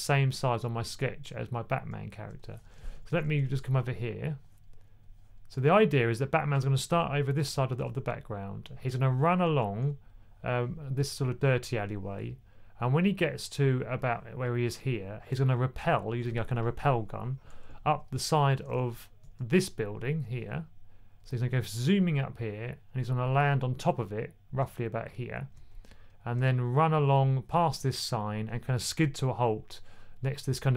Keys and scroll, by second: 2.6 1, 2.8 1, 2.9 1.